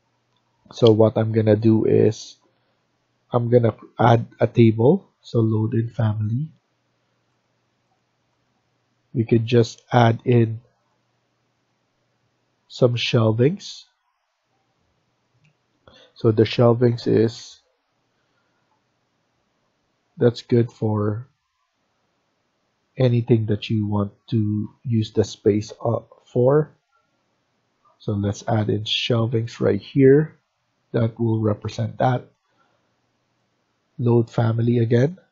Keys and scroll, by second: 16.6-17.7 typing, 29.3 Escape, 29.5 Escape.